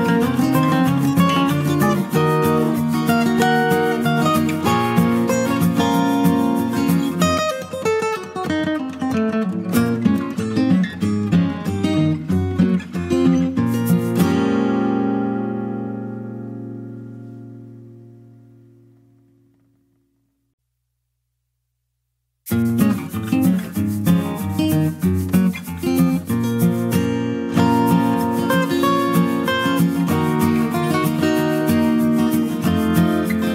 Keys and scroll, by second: 19.5 ctrl+space, 20.0 ctrl+space, 20.1-22.4 ctrl+space.